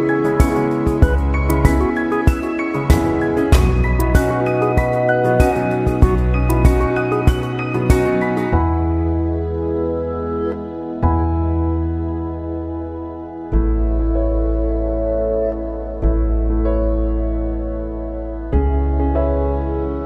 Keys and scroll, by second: 7.2 ctrl+=.